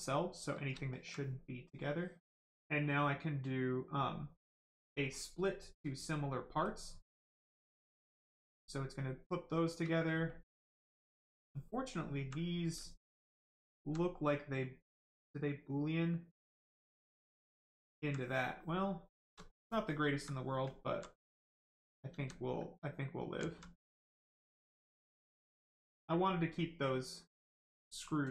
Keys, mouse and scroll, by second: 0.5 shift+right click, 0.7 alt+right click, 1.6 click, 1.7 click, 4.4 click, 7.7 right click, 9.4 shift+right click, 10.2 alt+click, 12.1 alt+right click, 14.9 right click, 16.9 alt+right click, 18.7 right click, 18.8 right click, 19.1 shift+right click, 19.4 alt+right click, 21.2 right click, 21.3 right click, 22.1 ctrl+z, 22.9 right click, 23.1 right click, 23.4 alt+right click, 24.0 right click, 24.1 right click, 24.1 shift+right click, 25.0 shift+click, 25.1 click.